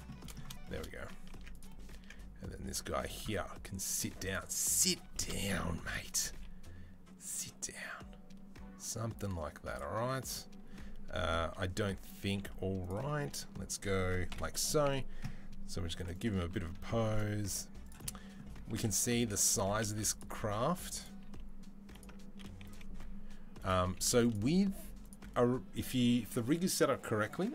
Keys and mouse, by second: 1.1 Tab, 1.4 click, 1.8 Tab, 3.7-5.8 drag, 5.8-19.0 middle drag, 6.1 g, 14.1 KP_7, 15.6 g, 16.2 r, 17.2 g, 18.6-21.0 typing, 22.2 r, 23.7 g, 24.4-27.5 middle drag, 24.4 r.